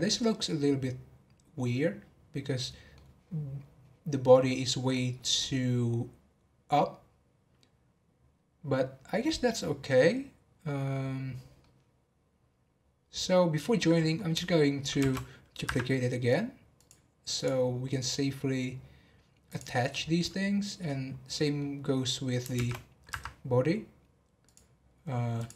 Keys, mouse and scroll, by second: 3.6 scroll down 5, 4.4-7.6 scroll up 3, 11.2-11.6 scroll down 2, 11.6-14.6 middle drag, 14.9 shift+d, 16.7 click, 17.3 click, 19.4 click, 21.3-22.5 middle drag, 22.5 shift+d, 24.4 click, 25.3 click.